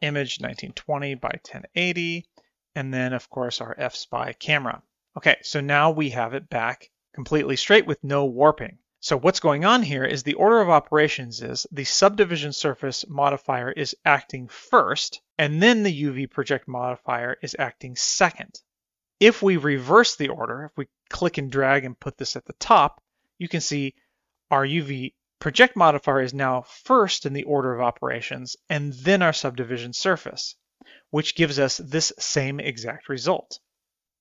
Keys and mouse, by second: 3.9-4.9 drag, 9.8-11.3 drag, 13.6 click, 16.9 click, 20.9-23.6 drag.